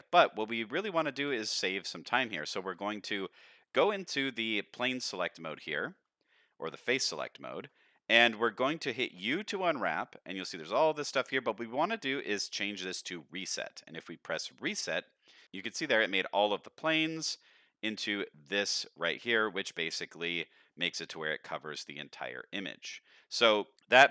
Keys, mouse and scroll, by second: 0.2 middle click, 1.2 3, 1.6 middle click, 2.8 shift+middle click, 6.4 shift+middle click, 7.4 shift+middle click, 7.8 middle click, 9.1 u, 20.0 middle click, 20.6 scroll up 1, 20.9 shift+middle click.